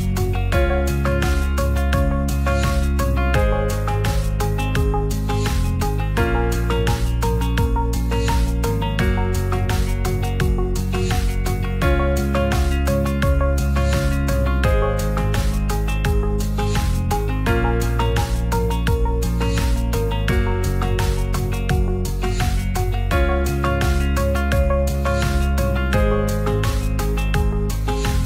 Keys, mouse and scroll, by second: 0.3 middle drag, 1.3 click, 2.6-4.7 drag, 6.5-7.7 drag, 8.8-10.7 drag, 12.2 ctrl+s, 12.6-13.0 middle drag, 15.0-17.7 drag, 19.3-21.2 drag, 21.7 ctrl+s, 22.6 shift+middle click, 24.1-24.6 drag, 26.1 shift+click, 26.6 click.